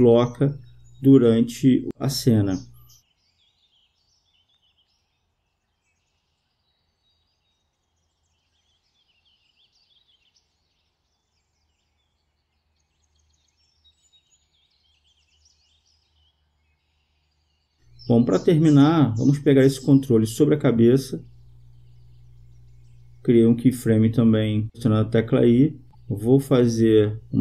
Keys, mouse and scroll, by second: 1.9-3.7 drag, 5.7-7.4 drag, 8.2-11.5 drag, 11.6-13.1 drag, 21.1-22.8 right drag, 22.3 click, 24.6 i, 26.5-27.4 drag.